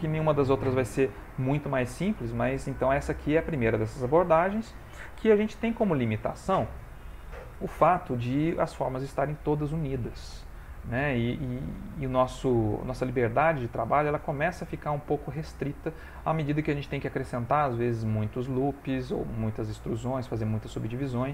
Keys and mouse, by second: 2.8 middle click, 9.9 middle click, 20.0 middle click.